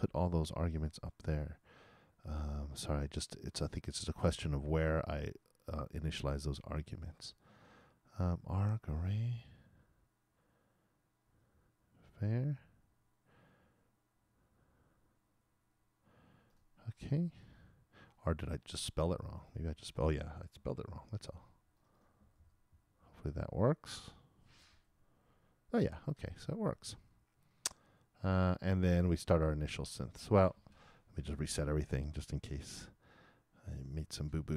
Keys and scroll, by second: 20.9 super+c, 22.3 super+v, 24.8 super+Return, 31.2 shift+super+l, 33.6 super+b.